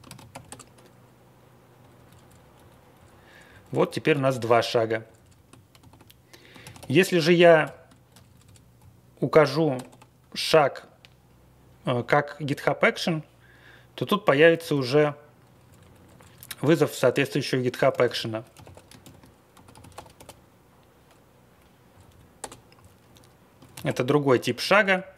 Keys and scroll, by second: 0.3 ctrl+x, 1.7 Up, 2.0 Page_Up, 2.2 Page_Up, 2.5 Page_Down, 2.9 Page_Down, 3.5 Page_Down, 3.6 Page_Up, 3.8 Page_Up, 4.1 ctrl+a, 4.3 ctrl+space, 4.3-4.7 Down, 5.0 Down, 5.7 ctrl+g, 6.6 ctrl+x, 6.7 o, 7.6 ctrl+l, 8.1 Up, 8.4 Up, 8.7 ctrl+l, 9.0 Home, 9.3 Home, 9.7 BackSpace, 9.8 BackSpace, 14.6 ctrl+x, 14.7 o, 15.5 Page_Up, 15.6 Page_Up, 15.7 Page_Up, 15.9 Page_Up, 16.0 Page_Up, 16.1 Page_Up, 16.3 Page_Up, 17.9 ctrl+x, 18.0-20.6 typing, 21.9 Page_Down, 22.3 Return, 22.7 Home, 23.7 ctrl+c, 23.8 i, 24.8 space.